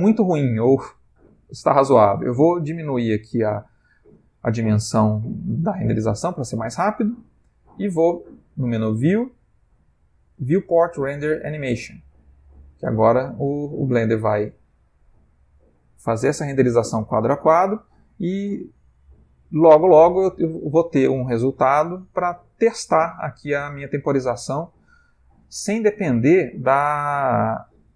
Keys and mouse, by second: 7.1 click.